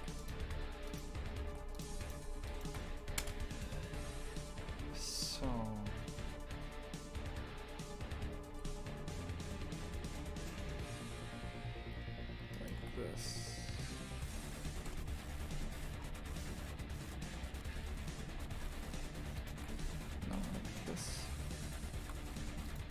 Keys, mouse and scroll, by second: 0.9 shift+right click, 1.8 shift+right click, 2.0 alt+shift+right click, 2.5 alt+shift+right click, 3.2 KP_0, 8.6 g, 14.9 KP_0, 15.5 a, 16.0 scroll up 2, 18.6 2, 19.4 alt+shift+right click, 20.3 a, 20.7-21.6 scroll up 2, 21.6 alt+shift+right click, 22.3 a, 22.7 alt+shift+right click.